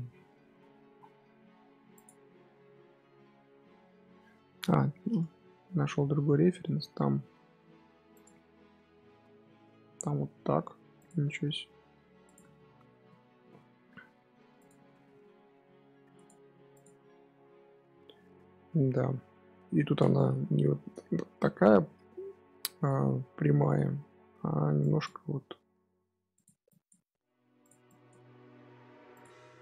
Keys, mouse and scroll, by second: 4.9-7.1 middle drag, 7.1 s, 9.8 e, 11.1 s, 12.3 Tab, 12.8 Tab, 13.3 2, 14.2 scroll down 3, 14.3 Tab, 14.5 click, 14.7 scroll up 1, 14.8-15.7 middle drag, 15.7-16.1 scroll up 1, 16.1 click, 16.6 click, 17.1 Tab, 18.1-19.4 scroll up 1, 19.4 middle click, 20.2 KP_7, 20.6-21.2 scroll down 3, 21.2-21.6 scroll up 3, 21.6-24.6 shift+middle drag, 24.7 click, 25.7 g, 26.6 click, 26.9 g, 27.8 click, 28.1 g, 29.2-29.6 middle drag.